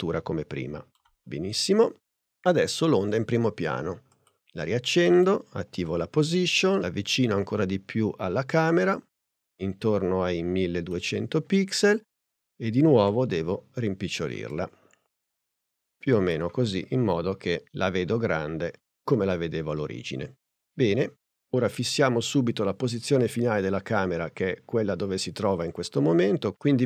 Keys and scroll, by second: 5.9 p, 13.1 s.